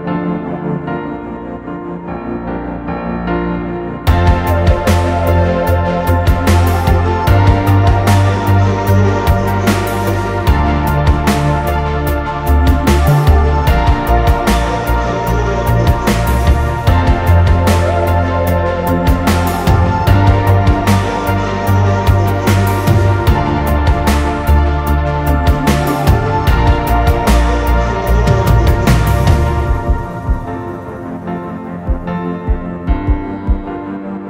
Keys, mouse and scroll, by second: 0.0 ctrl+t, 1.9 alt+shift+click, 3.6 Return, 28.8 double click, 32.4 ctrl+Return.